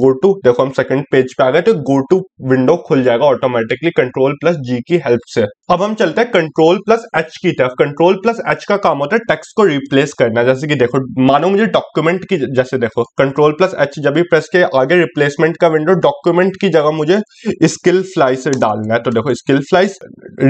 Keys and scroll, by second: 6.0 ctrl+h.